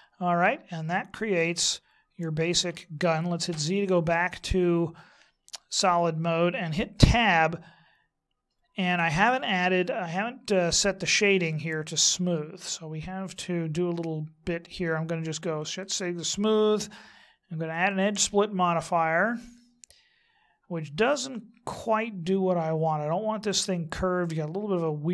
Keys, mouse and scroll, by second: 0.9 middle click, 3.5 z, 7.0 Tab, 10.8-13.2 scroll up 18, 13.2-15.6 scroll up 3, 15.6 click, 17.7 click.